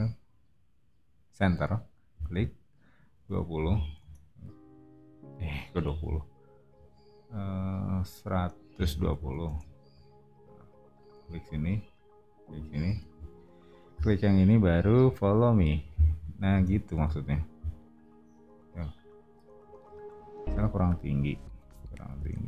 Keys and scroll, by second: 3.3-4.2 typing, 6.0 super+z, 8.5-9.6 typing, 12.8 space, 16.5 space, 16.9 o, 22.2 space.